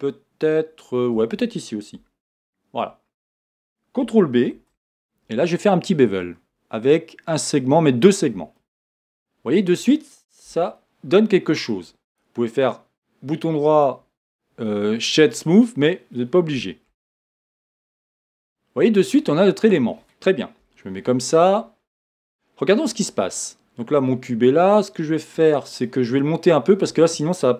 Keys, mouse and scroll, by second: 2.3 alt+shift+click, 4.5 ctrl+b, 8.1 click, 8.5-12.1 middle drag, 10.5 Tab, 12.1-14.6 right drag, 14.6-16.9 middle drag, 17.6 middle click, 17.6 z, 20.6 KP_1, 22.2 scroll down 2, 22.8 middle click, 26.5-27.5 scroll down 1.